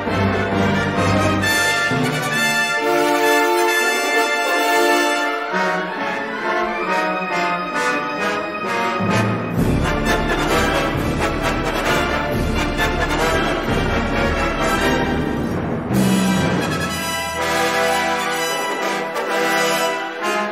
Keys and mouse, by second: 0.9 middle click, 2.2 s, 4.4 ctrl+r, 7.4 ctrl+z, 8.1 middle click, 9.5 3, 9.8 click, 11.1 middle click, 12.5 middle click, 13.9 e, 14.9 s, 15.9 middle click, 17.2 g, 19.4-20.5 middle drag.